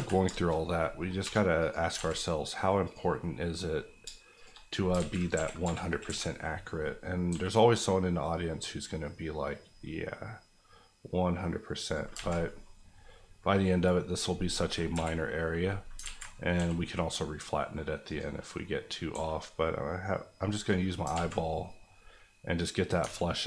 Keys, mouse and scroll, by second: 0.3 shift+middle click, 0.4 shift+scroll up 2, 0.8 middle click, 1.0 scroll down 1, 1.2 2, 1.6 click, 1.9 alt+z, 2.4 middle click, 2.8 click, 3.2 middle click, 4.0 shift+middle click, 4.3 shift+click, 4.7 scroll down 2, 4.9 alt+z, 5.3 KP_1, 5.6 KP_3, 6.0 KP_1, 6.7 scroll up 1, 7.3 g, 11.8 click, 12.1 alt+z, 12.4 scroll down 1, 12.6-14.5 middle drag, 14.9 KP_1, 15.8 scroll up 1, 16.0 alt+z, 16.5 g, 18.0 click, 19.1 g, 20.4 click, 21.1 alt+z, 21.3 scroll down 1, 21.6 middle click, 23.0 Tab, 23.2 scroll down 1.